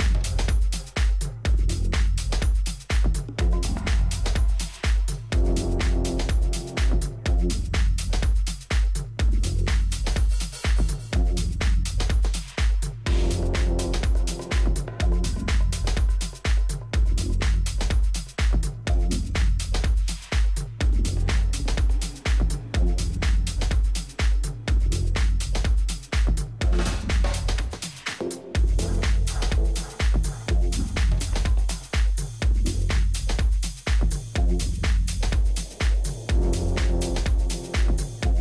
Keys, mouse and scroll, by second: 3.3 Tab, 4.2 a, 4.7 a, 5.0 a, 5.4 a, 5.9-8.7 middle drag, 8.1 Tab, 8.8 z, 9.4 z.